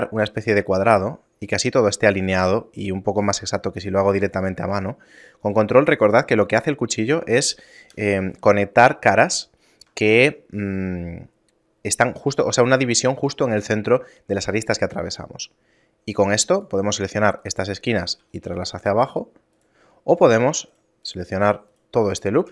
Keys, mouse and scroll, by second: 9.4 shift+middle click, 16.6 right click, 17.0 shift+right click, 17.4 shift+right click, 17.8 shift+right click, 18.2 s, 20.8 shift+right click, 21.0 shift+right click, 21.7 shift+right click, 22.1 shift+right click.